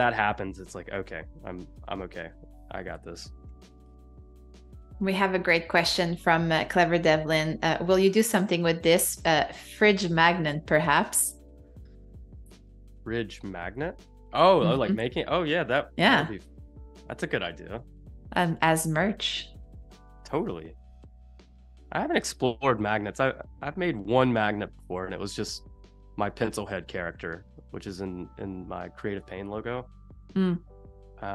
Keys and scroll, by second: 0.3 shift+super+[, 1.3 super+], 3.5 i, 4.4 Escape, 4.8 v, 5.8 space, 10.7 space, 13.9 super+-, 14.6 super+=, 14.9 space, 18.2 super+=, 19.7 space, 20.5 z, 21.0 a, 22.8 v.